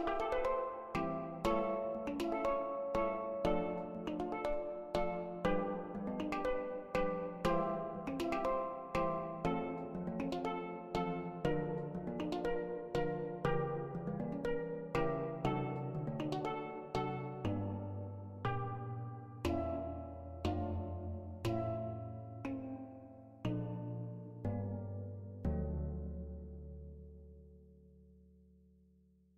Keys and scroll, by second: 7.8 ctrl+z, 18.8 ctrl+z.